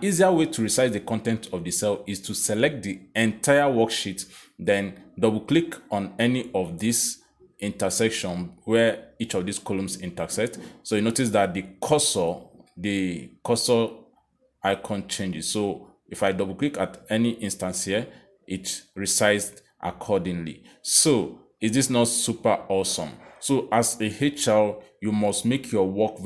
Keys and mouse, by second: 3.6 click, 16.1 click, 16.3 click, 19.5 click, 20.5 click, 21.9 click.